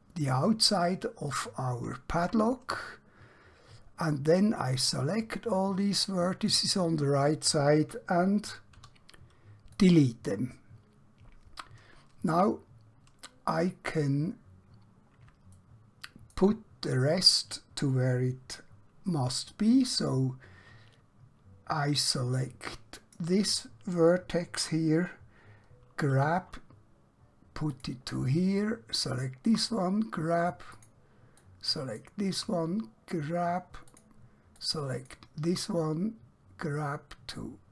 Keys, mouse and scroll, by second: 1.4 shift+click, 5.0 click, 8.8 x, 9.7 click, 12.9 scroll up 1, 14.9-15.4 scroll down 1, 15.6 shift+middle click, 22.3 click, 26.2 g, 27.8 click, 29.6 g, 30.8 click, 32.4 g, 34.0 click, 35.6 g.